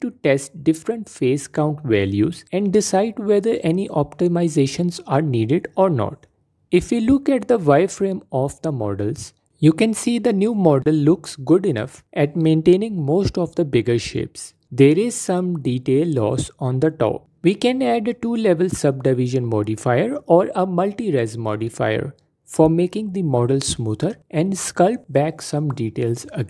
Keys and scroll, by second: 10.4 ctrl+2, 12.3 F4, 13.0 F4, 14.0 Tab, 14.8 f, 15.7 f, 17.4 f, 18.1 f, 23.1 f.